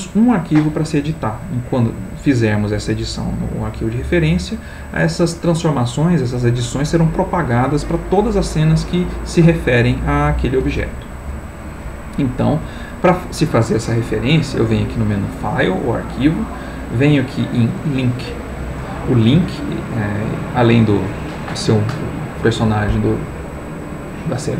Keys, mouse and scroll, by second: 14.7 click.